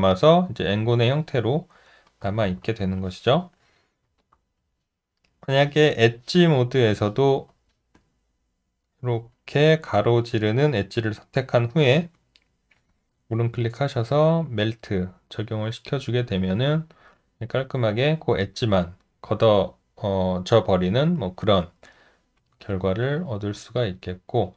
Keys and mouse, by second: 2.4 ctrl+z, 4.2 shift+click, 22.6 alt+right click, 23.2 alt+middle click, 24.0 alt+click.